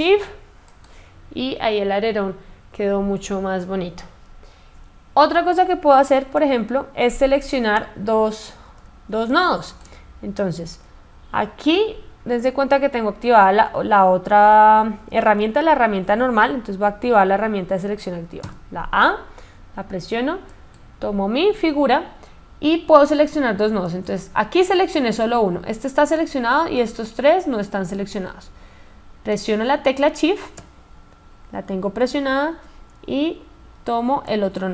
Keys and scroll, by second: 17.6 a.